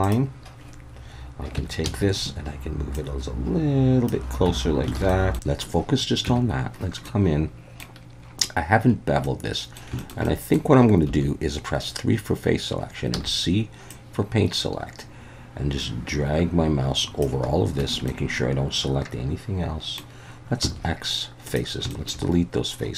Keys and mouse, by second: 1.6 Tab, 1.8 a, 3.0-4.1 drag, 4.5 Tab, 5.0 alt+a, 5.1 middle click, 6.3 Tab, 7.1 middle click, 9.2 middle click, 10.0 shift+middle click, 10.3 middle click, 11.1 3, 13.1 c, 17.8 Escape, 18.1-20.0 middle drag, 20.6 x, 21.9 shift+middle click.